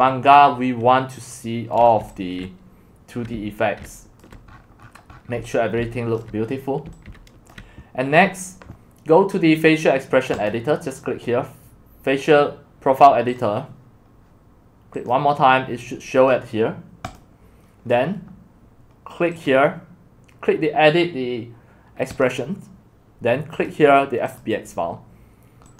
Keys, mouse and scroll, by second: 0.0-4.3 typing, 1.9 click, 4.2 click, 4.5-5.4 scroll down 26, 6.2 click, 6.4-6.8 scroll up 5, 7.5-20.5 drag, 24.4 click.